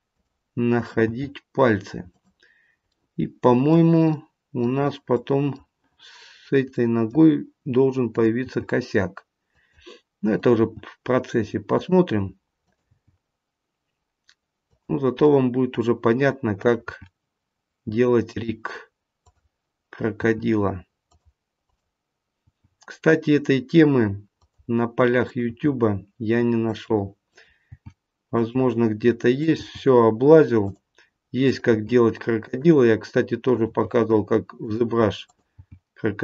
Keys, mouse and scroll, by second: 0.6 click, 1.3 g, 2.9 middle click, 5.1 middle click, 6.1 scroll up 2, 6.7 middle click, 8.1 click, 8.6 g, 10.2 click, 10.8 g, 12.5 click, 13.0 g, 15.2 middle click, 16.5 click, 17.0 g, 19.1 click, 20.1 g, 21.5 click, 22.4 g, 25.1 click, 25.7 g, 27.2 click, 27.7 g, 29.2 click, 29.8 g, 31.4 click, 31.8 g, 33.4 click, 34.0 g, 35.1 click, 35.7 g.